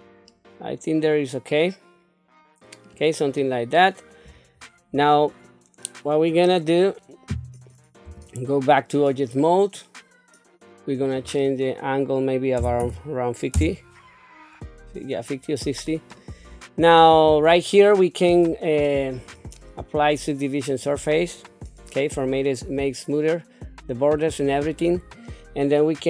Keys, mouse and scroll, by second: 0.3-2.8 middle drag, 3.1 scroll down 2, 3.7 middle click, 8.0 Tab, 11.0-13.5 drag, 19.1-20.9 drag.